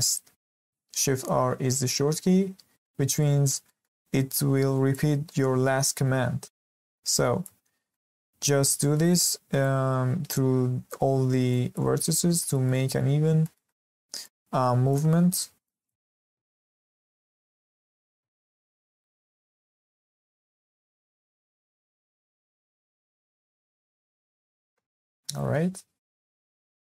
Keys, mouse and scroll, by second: 2.8-3.3 middle drag, 3.3 scroll up 2, 3.6-4.1 shift+middle drag, 4.1 click, 6.7 shift+r, 7.1 click, 7.5 shift+r, 7.9-8.3 middle drag, 8.3 scroll down 1, 8.6-9.6 shift+middle drag, 9.6 click, 11.1 shift+r, 11.5 click, 11.8 shift+r, 12.1 scroll down 2, 12.4-13.1 shift+middle drag, 13.1 scroll up 3, 13.4-14.2 shift+middle drag, 14.2 drag, 15.3 shift+r, 15.6 click, 15.9 shift+r, 16.2 scroll down 2, 16.4-17.5 shift+middle drag, 17.5 click, 18.4 shift+r, 18.8 click, 19.0 shift+r, 19.3-20.1 middle drag, 20.1 click, 20.9 shift+r, 21.1 click, 21.4 shift+r, 21.7-22.7 middle drag, 22.7 click, 23.8 shift+r, 24.1 click, 24.4 shift+r, 24.8-25.2 scroll down 4, 25.2-26.5 middle drag, 26.5 scroll up 2, 26.7 shift+middle drag.